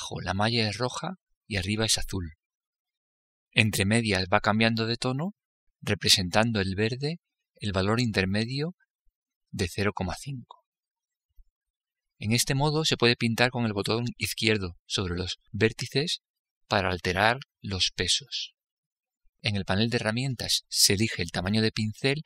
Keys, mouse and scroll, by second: 21.1-22.2 drag.